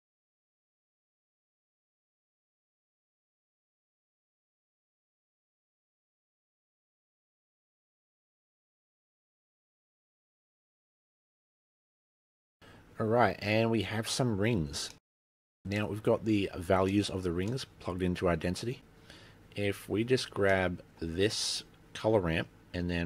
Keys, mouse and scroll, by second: 1.0 click, 5.8 click, 6.7 click, 10.0 click, 11.0 scroll down 4, 11.3 middle click, 11.6 middle click, 12.8 middle click, 15.1 middle click, 15.5-15.9 scroll down 14, 15.9 middle click, 17.1 middle click, 17.6 middle click, 19.8 middle click, 20.2 scroll down 3, 20.4 middle click, 20.6 scroll up 3, 20.9-21.5 scroll down 1, 21.5 middle click, 21.8 click.